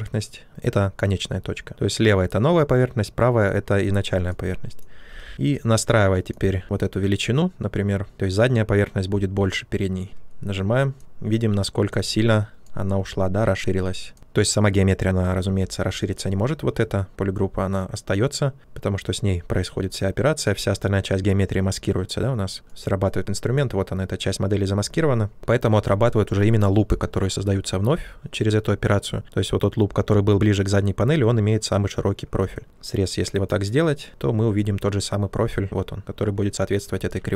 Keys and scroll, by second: 5.1 ctrl+z, 15.3 ctrl+z, 36.9 ctrl+z.